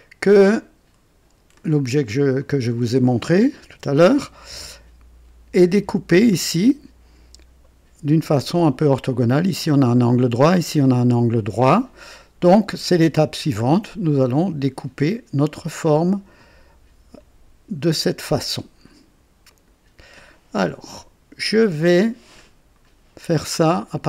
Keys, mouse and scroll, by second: 2.4-3.1 drag, 3.7 KP_2, 19.5 click.